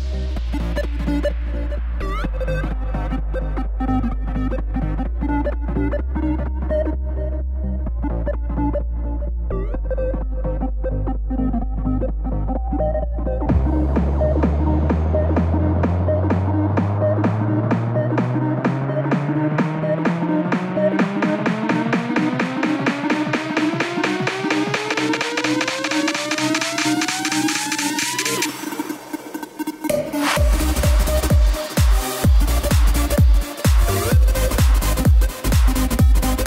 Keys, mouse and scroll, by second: 0.1 KP_7, 1.4-3.4 scroll down 2, 3.4 z, 6.2 shift+a, 7.2-8.3 drag, 8.3-8.6 scroll up 5, 8.6-9.5 shift+middle drag, 9.5 Tab, 10.2 click, 12.2 r, 14.5 click, 14.9 r, 17.3 g, 20.1 click, 20.3 g, 22.8 click, 23.1 g, 26.6 click, 26.7 g, 32.0 Tab, 32.7 click, 33.4 Tab, 34.6 Tab, 35.1-35.7 scroll down 3.